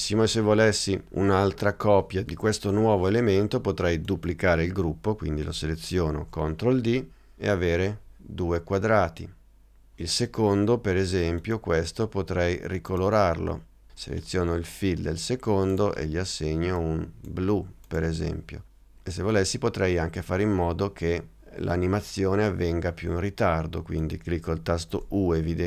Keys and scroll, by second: 6.3 super+d.